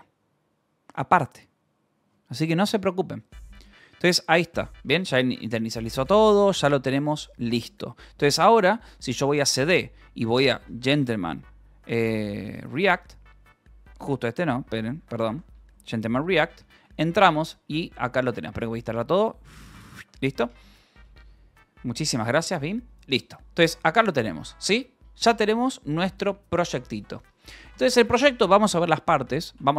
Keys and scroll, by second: 9.0-11.5 typing, 12.7 Tab, 13.9 BackSpace, 14.9 r, 15.6 Return, 16.0-18.6 typing, 19.9 q, 22.4-24.5 typing, 26.0 space, 26.6 u.